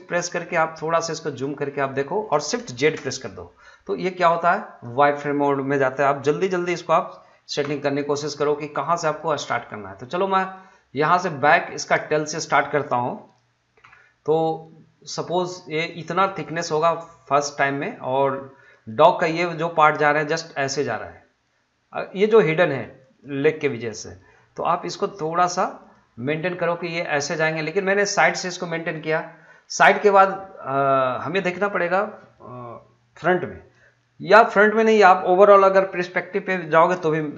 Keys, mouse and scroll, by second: 0.3-0.9 scroll down 1, 1.4 scroll up 1, 1.6 shift+middle click, 2.8 shift+z, 4.2-7.6 drag, 7.6 g, 11.0 click, 13.8 g, 18.6 click, 23.0 click, 23.5 g, 25.8 click.